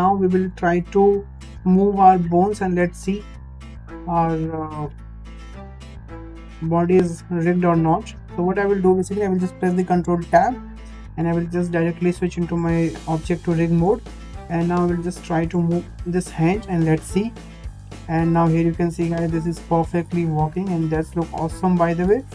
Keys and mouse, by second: 1.4 shift+middle drag, 2.6 click, 5.4 shift+middle drag, 5.9-6.3 middle drag, 6.8-7.4 middle drag, 7.9 shift+middle click, 10.3 ctrl+Tab, 14.2 drag, 14.8-15.6 middle drag, 17.3 g.